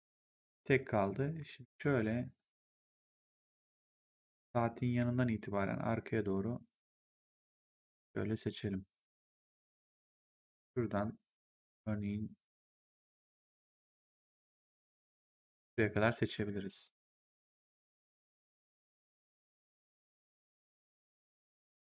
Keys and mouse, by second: 7.6 right click, 10.0 click, 15.3 shift+click, 16.7 shift+click, 21.7 click.